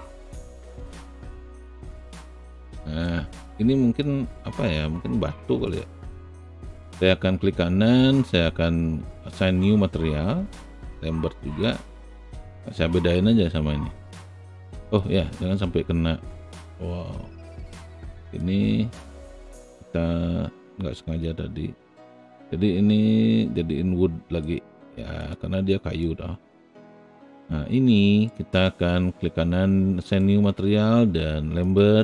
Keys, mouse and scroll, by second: 0.8 click, 1.2 alt+right click, 1.7-3.0 alt+drag, 4.1-5.6 drag, 7.0-9.5 right drag, 11.6 click, 14.9 click, 18.3 click, 19.1-24.4 right drag, 25.9 alt+click, 26.9 alt+click, 28.3 alt+right click, 31.6 click.